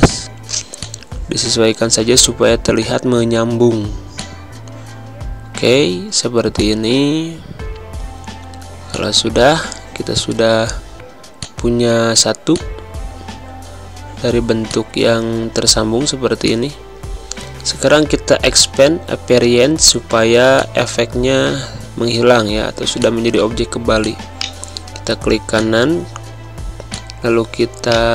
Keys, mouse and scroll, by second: 0.2 7, 0.7 click, 4.1 click, 5.5 6, 6.5 click, 8.9 click, 11.0 z, 11.4 click, 12.2 space, 12.5 click, 12.6 space, 13.7 space, 14.6 click, 18.5 click, 26.6 click, 27.9 right click.